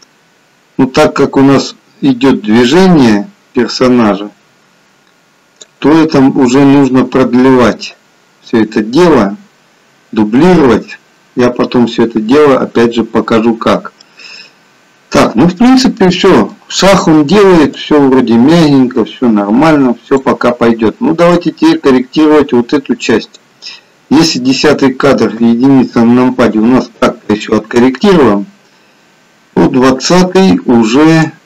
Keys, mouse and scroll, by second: 13.2-13.8 scroll down 1, 13.8 scroll down 1, 14.1 middle click, 18.0 click, 21.6 click, 25.4 KP_1, 29.7 click.